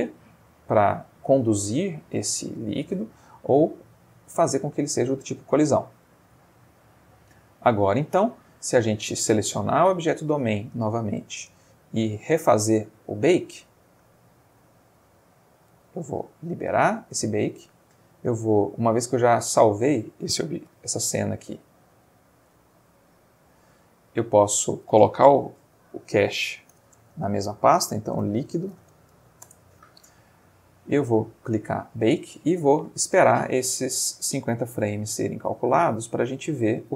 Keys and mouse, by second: 3.7 click, 4.3 click, 6.6-8.4 middle drag, 9.6 click, 11.8 click, 13.2 click, 14.2 click, 15.1 middle click, 16.5 click, 20.8 ctrl+s, 22.9 click, 24.0 click, 25.4 ctrl+a, 26.7 /, 28.2-29.1 typing, 29.5 Return, 31.6 click.